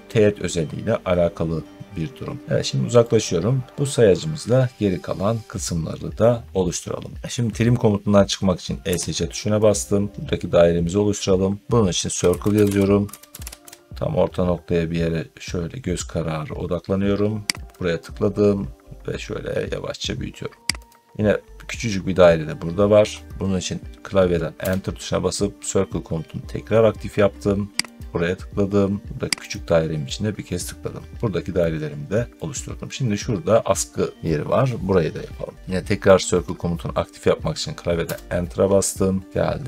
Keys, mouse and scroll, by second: 1.7 middle click, 2.4 middle click, 3.7 middle click, 5.5 scroll down 3, 8.7 Escape, 9.7-10.6 scroll up 2, 11.9-13.8 typing, 17.6 click, 20.8 click, 24.5 Return, 27.9 click, 29.4 click, 30.8-31.1 scroll up 2, 32.2 middle click, 32.2 scroll, 34.1 scroll up 2, 34.8 scroll down 2, 37.9 Return.